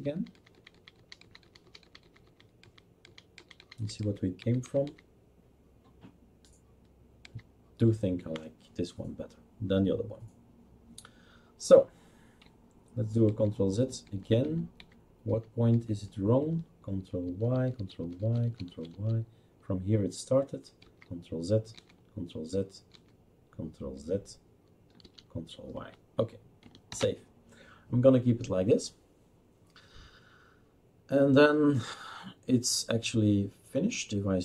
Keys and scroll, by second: 0.1 ctrl+z, 0.5 ctrl+z, 0.7 ctrl+z, 0.9 ctrl+z, 1.2 ctrl+z, 1.4 ctrl+z, 1.6 ctrl+z, 1.8 ctrl+z, 2.0 ctrl+z, 2.2 ctrl+z, 2.6 ctrl+z, 3.0 ctrl+z, 3.3 ctrl+z, 3.6 ctrl+z, 4.0 ctrl+z, 4.4 ctrl+z, 4.8 ctrl+z, 7.2 ctrl+z, 13.3 ctrl+z, 14.0 ctrl+z, 14.4 ctrl+z, 14.8 ctrl+z, 15.3 ctrl+z, 15.7 ctrl+z, 17.2 ctrl+y, 17.5 ctrl+y, 17.8-18.2 ctrl+y, 18.5 ctrl+y, 18.9 ctrl+y, 19.1 ctrl+y, 20.8 ctrl+z, 21.7 ctrl+z, 22.9 ctrl+z, 25.0 ctrl+y, 26.9 ctrl+s.